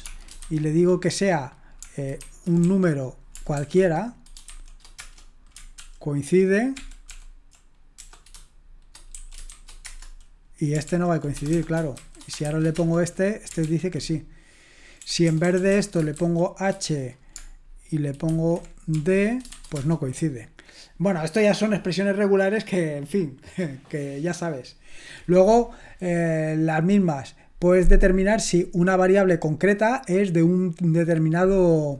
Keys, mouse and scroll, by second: 0.0-0.4 typing, 2.2-5.5 typing, 7.1 ctrl+p, 8.0-12.5 typing, 10.9 ctrl+p, 12.8 Return, 13.5 typing, 13.6 ctrl+p, 15.0-16.2 typing, 18.3-19.5 typing, 19.8 Return.